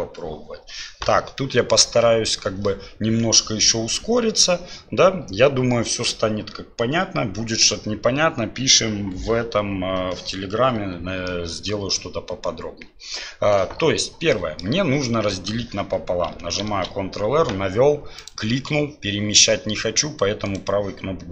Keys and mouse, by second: 1.4 click, 11.2 middle click, 14.3 middle click, 16.7 ctrl+r.